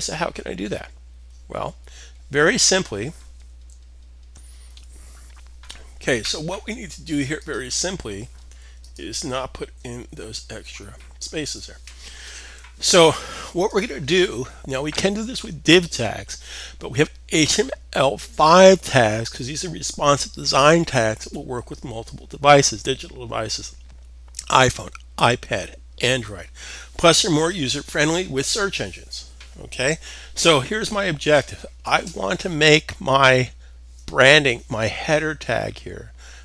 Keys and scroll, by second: 10.7 super+s.